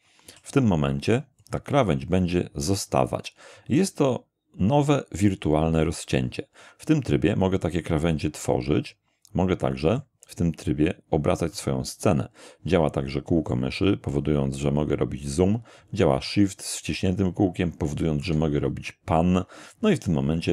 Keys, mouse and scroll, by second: 0.3 e, 1.4 click, 7.6-10.2 middle drag, 11.5-13.7 middle drag, 13.8-14.2 scroll up 1, 14.4 scroll down 1, 16.3-18.4 shift+middle drag.